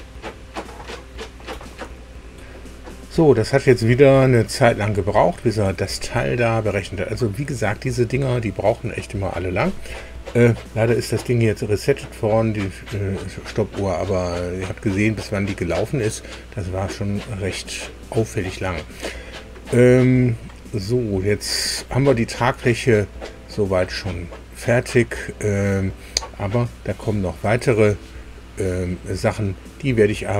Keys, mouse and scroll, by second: 2.3 super+r, 20.5 scroll down 2, 22.9 scroll up 2.